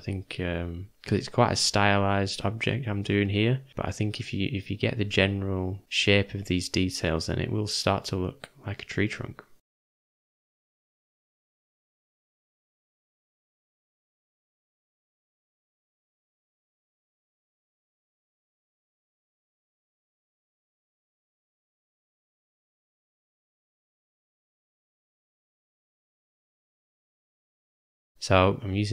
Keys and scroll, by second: 0.4 u, 1.0 ], 1.2 ], 1.4 ], 14.1 [, 14.2 [, 14.5 [, 14.7 [, 22.4 m, 24.6 ], 24.8 ].